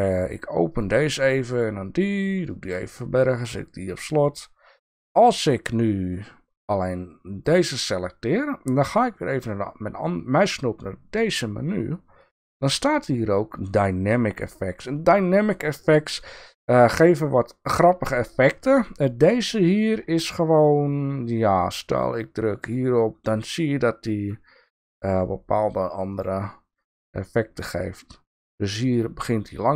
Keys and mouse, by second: 0.7 click, 1.5 click, 2.5 drag, 3.2 drag, 7.4 click, 9.4-22.7 right drag, 22.7 click, 24.2-26.2 drag.